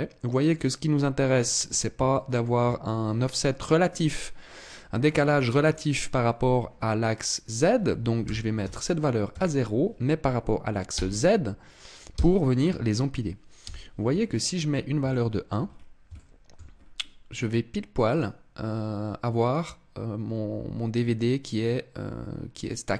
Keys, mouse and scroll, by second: 0.4-1.0 scroll up 3, 1.7 shift+middle click, 7.0 click, 13.1 KP_1, 14.0-14.6 scroll down 4, 14.6 shift+middle click, 15.2-15.8 scroll up 5, 15.8 shift+middle click, 16.3-16.6 scroll up 2, 17.6 click, 19.1 click.